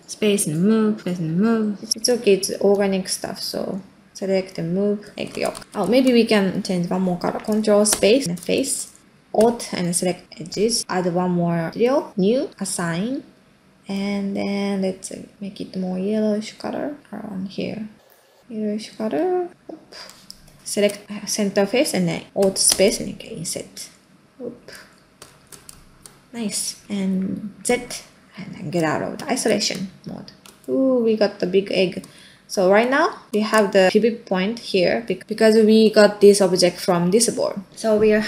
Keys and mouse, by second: 0.5-5.2 space, 5.4 ctrl+space, 5.9 ctrl+middle drag, 6.5 middle drag, 7.9 ctrl+space, 8.7 ctrl+middle click, 9.8 alt+click, 20.2 middle click, 20.6 ctrl+z, 20.6 ctrl+space, 21.2 middle click, 22.6 alt+space, 24.8 ctrl+middle click, 25.2 alt+space, 25.8 ctrl+middle click, 26.8 ctrl+middle click, 28.4 z, 30.4 space, 32.2 middle click, 35.8 middle click, 36.7 middle click, 37.3-37.6 middle drag.